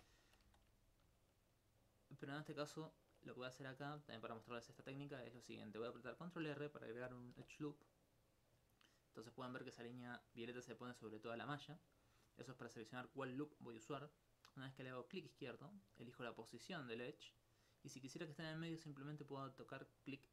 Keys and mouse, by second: 0.3 alt+click, 4.4 alt+click, 15.2 click.